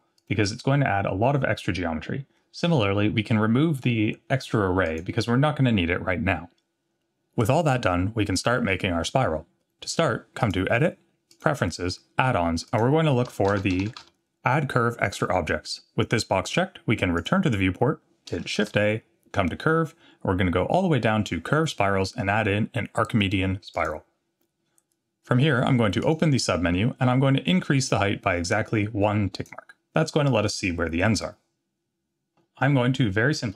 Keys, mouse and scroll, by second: 0.2 click, 4.9 click, 10.4-11.5 drag, 18.6 shift+a, 24.9-25.7 scroll down 2, 26.1 click, 29.3 click.